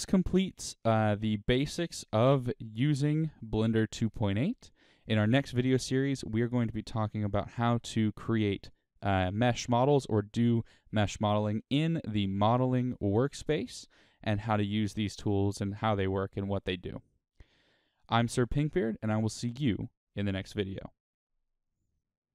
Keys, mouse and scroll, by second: 11.9-14.4 drag.